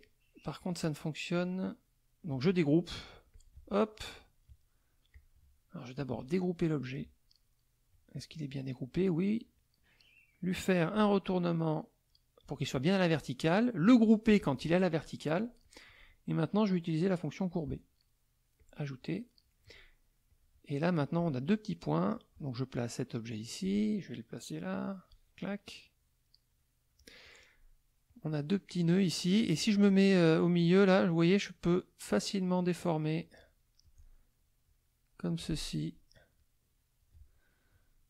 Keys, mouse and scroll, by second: 0.5 click, 1.3 click, 1.8 click, 3.3 click, 5.1 click, 6.7 click, 9.4 click, 10.4-12.6 drag, 14.3 click, 15.6 click, 17.5 click, 18.5 click, 19.2 middle click, 20.2 click, 20.7 middle click, 22.1-23.8 drag, 24.8-27.1 drag, 28.0 click, 30.6-33.3 drag, 34.6 click, 35.7 click, 36.3 click.